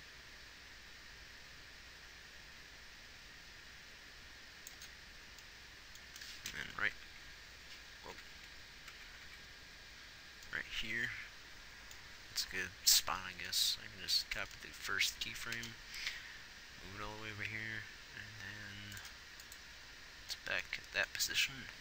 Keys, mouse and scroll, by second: 7.4 Right, 8.6 Left, 8.9 Left, 9.3 Right, 9.6 Right, 16.0 shift+d.